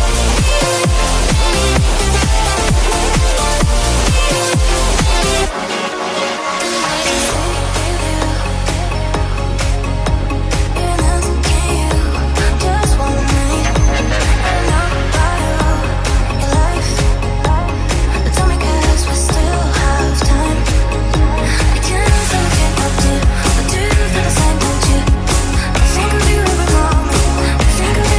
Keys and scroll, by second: 7.1 ctrl+c, 9.7 ctrl+v.